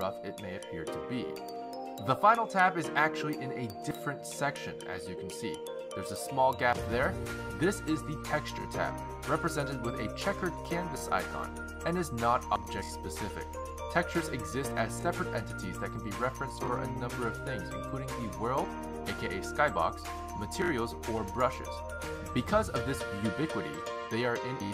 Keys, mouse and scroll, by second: 0.0-2.3 scroll up 17, 2.3-3.2 scroll up 1, 5.4 click, 23.9 click.